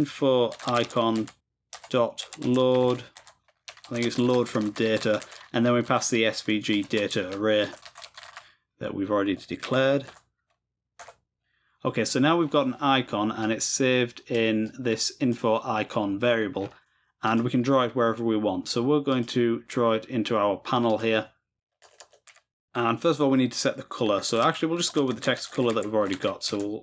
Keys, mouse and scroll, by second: 12.2-13.4 scroll down 2, 13.4-16.0 drag, 16.0-17.3 scroll down 2, 17.3 click, 17.4-18.9 scroll down 1, 19.1-20.7 drag, 20.9-22.5 drag, 24.9-26.6 typing.